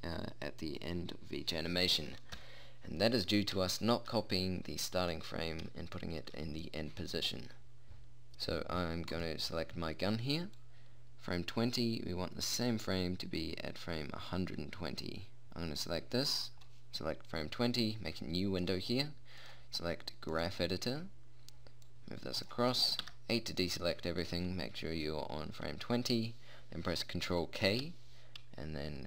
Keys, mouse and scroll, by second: 2.9 middle click, 4.3 middle click, 9.7-11.1 right drag, 11.1-12.9 drag, 12.9 middle click, 13.7 scroll up 1, 18.4 click, 23.6 a, 28.1 ctrl+k.